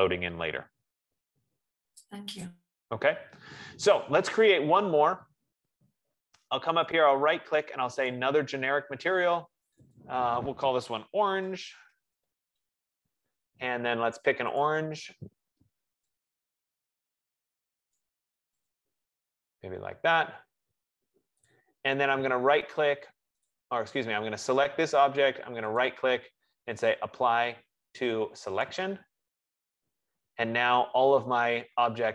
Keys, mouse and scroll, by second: 4.9 click, 7.2 right click, 8.4 click, 10.0 click, 10.2 click, 11.5 ctrl+a, 11.6-13.0 typing, 14.4-16.8 typing, 14.9 click, 18.1 click, 19.0 click, 21.7 click, 23.2 F15, 24.1 click, 26.1 right click, 28.9 click.